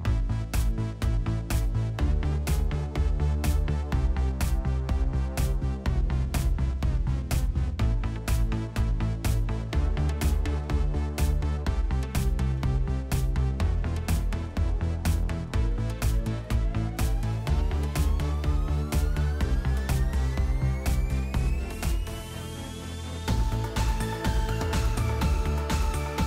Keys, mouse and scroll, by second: 0.0-1.9 typing, 4.4 click, 6.1 click, 7.1 click, 8.0-9.0 typing, 8.1 click, 8.8 click, 9.3 middle click, 9.3 middle click, 9.7 middle click, 10.8 click, 10.8 middle click, 12.3 click, 12.3-13.2 scroll, 13.2 click, 13.5-15.9 scroll, 15.9 scroll, 15.9 click, 16.5-22.2 typing, 18.3 Tab, 23.9 Tab, 24.3-25.3 typing.